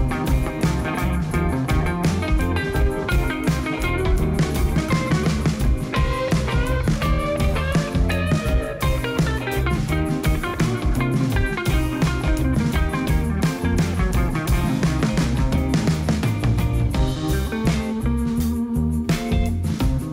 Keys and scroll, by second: 0.2 a, 2.6 g, 4.3 7, 4.8 shift+z, 6.4 g, 9.5 g, 10.0 shift+z, 13.9 g, 14.3 shift+z, 17.7 a.